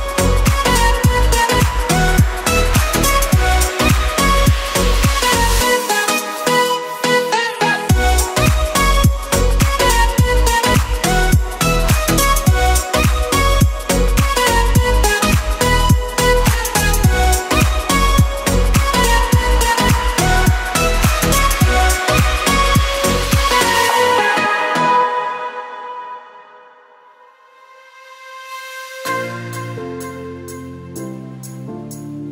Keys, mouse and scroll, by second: 1.3 s, 2.7 e, 5.9 s, 8.6 e, 11.4 ctrl+z, 12.0 e, 15.7 s, 17.6 e, 19.4 s, 22.0 click, 22.9 e, 26.8 s, 30.0 KP_Decimal, 31.0 e.